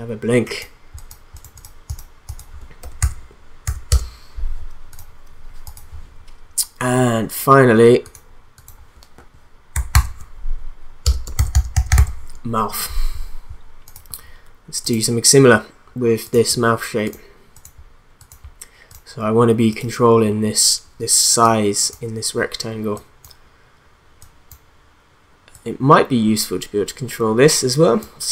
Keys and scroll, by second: 2.6-3.5 typing, 3.9 Return, 9.9 ctrl+d, 11.0 Return, 11.1-12.4 typing, 12.4 Return.